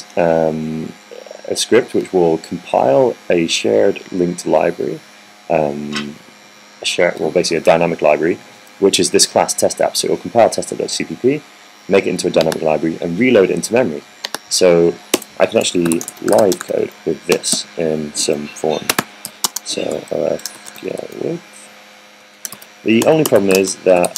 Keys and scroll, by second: 16.1 Return, 16.7-18.4 typing, 19.7-21.8 typing, 23.1-24.1 typing.